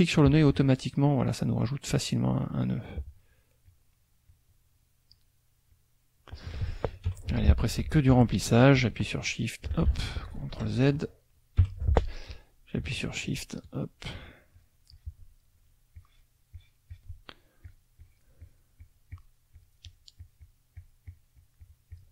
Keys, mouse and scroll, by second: 0.5 ctrl+alt+click, 1.0 ctrl+alt+click, 2.0-3.0 drag, 3.7 click, 4.2 click, 5.1 click, 5.7 click, 7.1 F6, 9.2 ctrl+click, 9.9 ctrl+z, 10.5 F2, 10.6 click, 11.6 F6, 13.2 shift+click, 13.7 shift+click, 14.1 shift+click, 14.5 shift+click, 14.9 shift+click, 16.0 shift+click, 16.5 shift+click, 17.6 shift+click, 18.0 shift+click, 19.5 shift+click, 20.7-22.1 shift+drag.